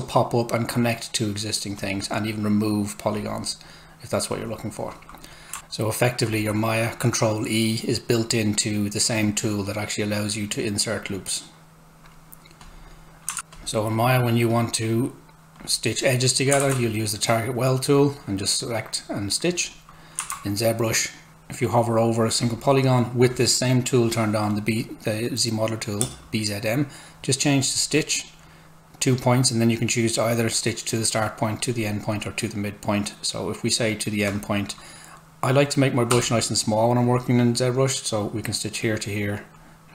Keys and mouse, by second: 13.5 click, 16.6 ctrl+z, 17.9 click, 20.3 Tab, 26.0 space, 36.1 s, 36.2 click.